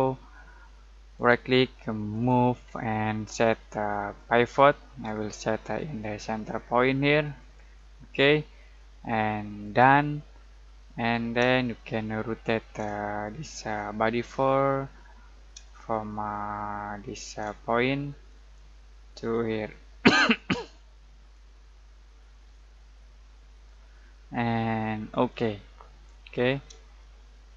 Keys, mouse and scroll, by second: 1.1 right click, 4.1 click, 7.3 click, 10.7 middle click, 11.6-18.2 shift+middle drag, 18.2-25.3 drag, 25.8 scroll down 1, 26.0-26.8 scroll up 1, 27.0-27.5 shift+middle drag.